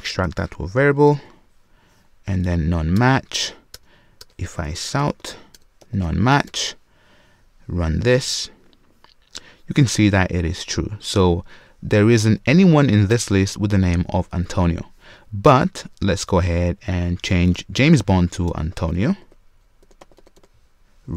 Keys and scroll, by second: 0.2 super+w, 1.1 alt+super+v, 7.8 Return, 17.4 alt+BackSpace.